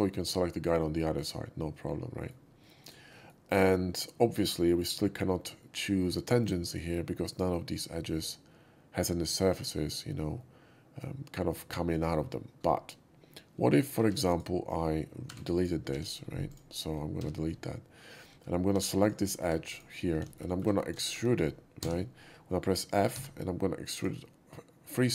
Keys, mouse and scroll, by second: 1.6 middle click, 2.6 shift+middle drag, 3.1 shift+middle click, 10.3-11.0 middle drag, 14.0 4, 14.2 click, 15.3 right click, 15.5 click, 15.8 x, 16.4 click, 17.3 middle click, 18.4-19.8 typing, 18.9 click, 19.4 right click, 19.6 click, 20.2 middle click, 20.4 alt+middle click, 20.8 scroll up 1, 21.0 shift+middle click, 21.7 e, 23.1 f, 23.9 click.